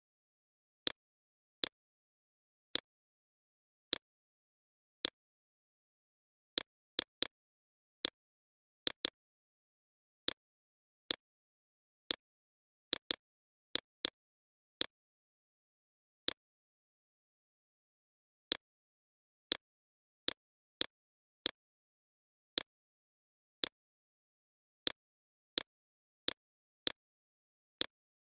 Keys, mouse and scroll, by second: 5.1 BackSpace, 5.7 click, 5.9 BackSpace, 6.4 right click, 6.6 BackSpace, 7.0 click, 7.4 BackSpace, 7.8 click, 8.7 right click, 9.1-12.6 drag, 12.6 right click, 13.4-16.6 drag, 16.6 right click, 17.2 click, 18.6 right click, 19.2 click, 20.3 right click, 20.8-23.9 drag, 26.1 click.